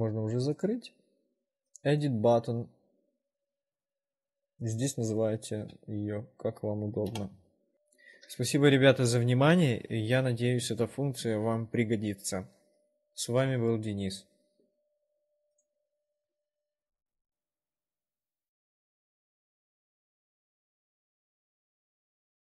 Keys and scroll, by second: 7.4 Return.